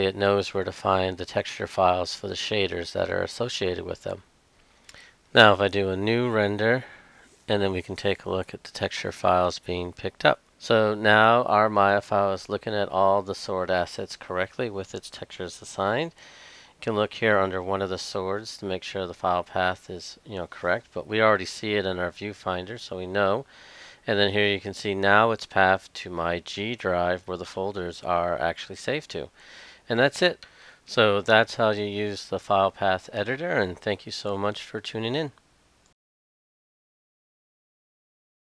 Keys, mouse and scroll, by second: 21.0 click, 21.6 click, 27.8 click.